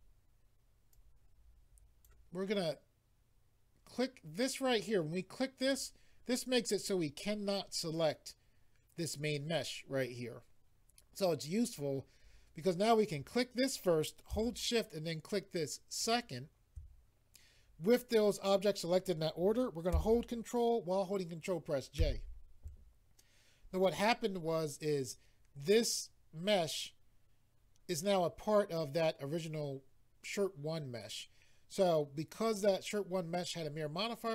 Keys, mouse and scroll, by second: 0.9 click, 5.6 click, 13.0 click, 15.9 shift+click, 22.0 ctrl+j.